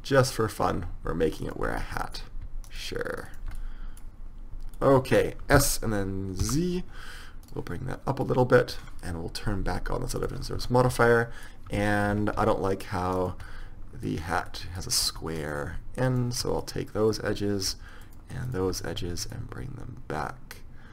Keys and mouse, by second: 2.0-5.1 middle drag, 5.7 s, 8.4-10.2 drag, 10.3 click, 10.7 Tab, 11.9 Tab, 12.3 Tab, 12.6 Tab, 13.3 middle click, 14.1 click, 14.2 middle click, 14.7 middle click, 15.6 middle click, 19.5 middle click, 20.4-20.9 right drag.